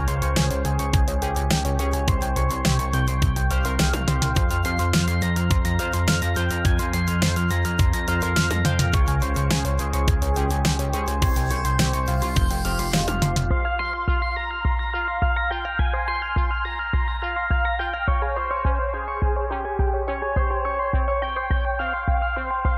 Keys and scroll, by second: 8.0 space, 18.4 space.